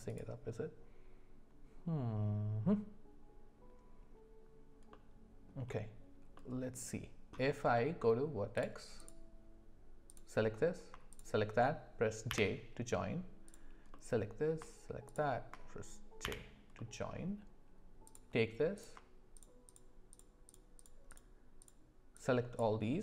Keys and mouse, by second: 4.9 middle click, 6.3 middle click, 9.0 click, 10.1 click, 12.3 j, 13.9 middle click, 16.2 j, 16.8 middle click, 19.3 shift+click, 19.6 shift+click, 21.1 shift+click, 22.2 shift+click.